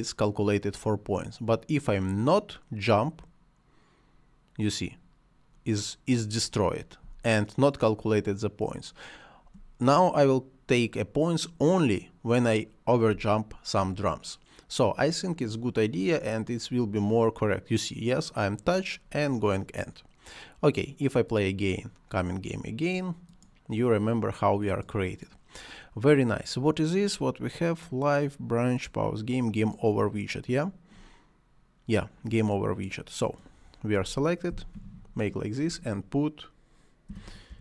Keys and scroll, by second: 7.0 space, 13.1 space, 34.5 c, 36.8-37.6 typing.